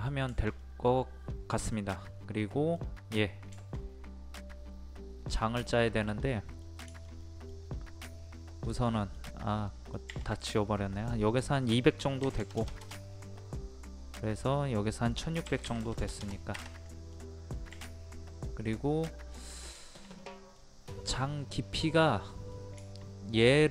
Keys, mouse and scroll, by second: 2.0-2.4 scroll up 1, 2.4 middle click, 2.8-3.5 scroll up 1, 3.5 shift+middle click, 5.7-6.2 scroll down 1, 6.2 middle click, 7.8 scroll up 1, 8.0 middle click, 8.6 scroll up 1, 8.8 scroll down 1, 8.9 middle click, 9.2-9.7 scroll up 1, 9.7 middle click, 9.9 scroll up 1, 10.9 click, 12.2 KP_2, 14.3 click, 15.4 KP_1, 16.9 middle click, 17.1-17.7 scroll down 1, 19.8 shift+middle click, 20.8 scroll up 1, 22.1 middle click, 22.8-23.7 shift+middle drag.